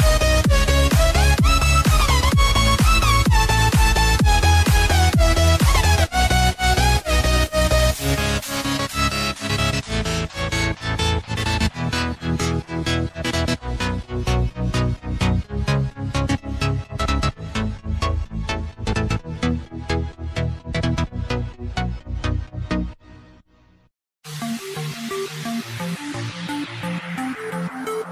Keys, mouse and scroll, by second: 9.4 right click, 16.4 click, 20.3 ctrl+j, 22.0 click, 22.8-23.2 scroll up 1, 23.2 space, 23.6 click, 23.8 space, 27.3 click.